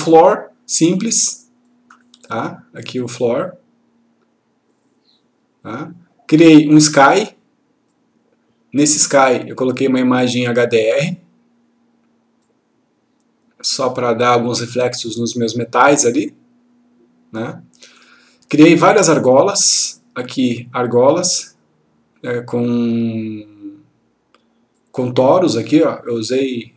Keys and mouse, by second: 7.9-8.8 drag.